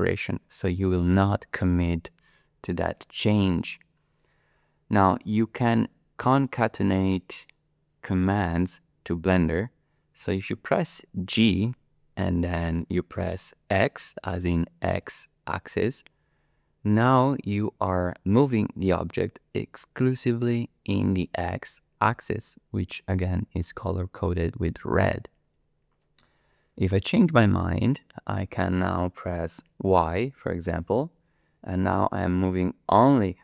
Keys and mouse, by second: 11.3 g, 15.0 x, 30.9 y.